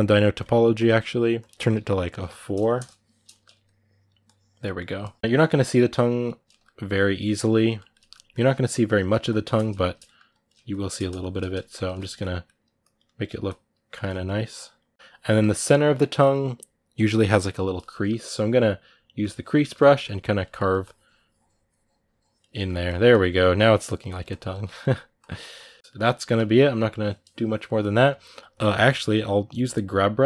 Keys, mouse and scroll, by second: 3.1 middle click, 3.4 click, 4.4 middle click, 4.8 click, 5.0 middle click, 5.2 click, 5.3 middle click, 5.7 click, 6.3 ctrl+middle click, 6.7 click, 7.0-8.1 middle drag, 8.1 click, 8.7 middle click, 9.0 shift+click, 9.3 middle click, 10.1 click, 10.7 middle click, 11.0 shift+click, 11.2 middle click, 11.5 shift+click, 11.7 middle click, 12.6 click, 12.8 middle click, 13.2 shift+click, 13.9 middle click, 14.4-15.8 drag, 15.8-19.0 middle drag, 19.0 click, 19.4 ctrl+middle click, 19.8 click, 20.3 ctrl+middle click, 20.6-22.3 drag, 22.3 ctrl+middle click, 22.6 shift+click, 23.0 ctrl+middle click, 23.2-25.8 drag, 25.8-29.4 middle drag, 29.4 g, 30.2 click.